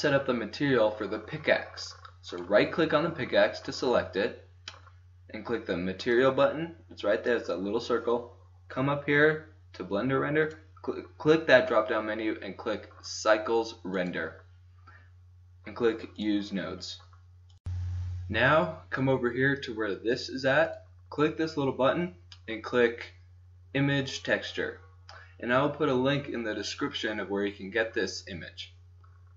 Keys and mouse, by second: 2.4-4.0 right drag, 6.0 click, 7.8 click, 8.7-10.3 middle drag, 10.3 click, 10.9 click, 16.1-17.6 drag, 20.8-22.5 drag, 23.6-24.7 middle drag.